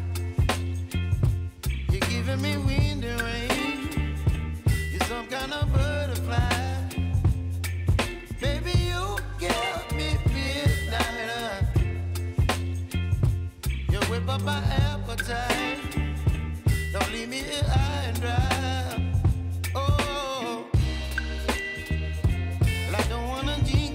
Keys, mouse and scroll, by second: 6.5 space, 8.9-15.4 drag, 15.4-17.6 drag, 17.8 space, 20.5 j, 21.1-23.9 drag.